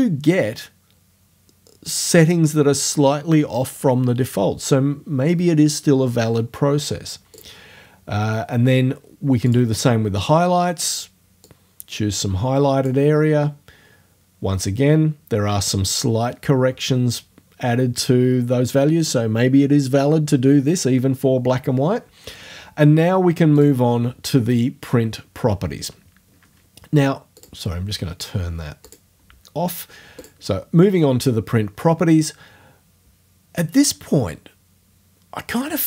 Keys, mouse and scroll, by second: 7.4 click, 9.5 click, 11.5-13.1 drag, 13.1-20.1 scroll up 1, 23.6 click, 27.4 click, 28.9 click, 30.2 click.